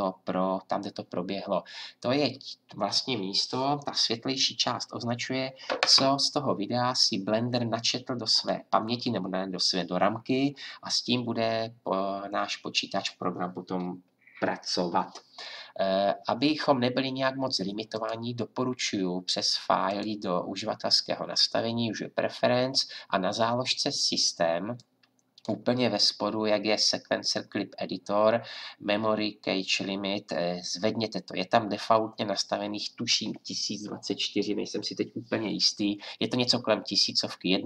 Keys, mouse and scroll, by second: 17.9-37.6 drag.